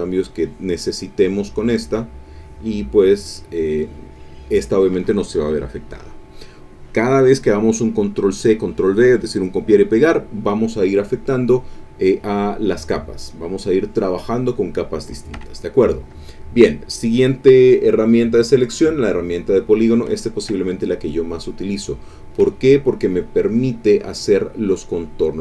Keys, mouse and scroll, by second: 2.2-3.2 drag, 3.6 click, 12.6 click, 12.9 click, 13.9 click, 14.4 click, 15.3 Escape, 18.4 click, 19.7 click, 20.3 ctrl+click, 20.6 ctrl+click, 21.3 ctrl+click, 21.9 click, 22.5 ctrl+click, 22.9 ctrl+click, 24.9 click.